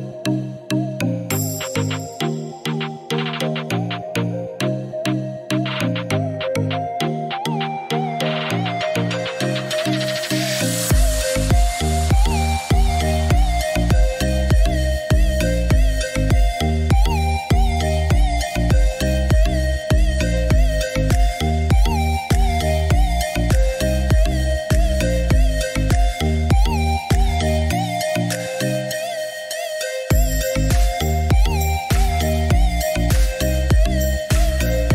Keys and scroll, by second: 1.2 1, 1.8 5, 2.2 4, 3.2 ., 4.7 5, 5.0 Return, 14.0 1, 14.3 0, 14.7 Return, 16.3 Escape, 27.3 BackSpace, 30.5 BackSpace, 30.8 6, 31.1 5, 31.3 Return.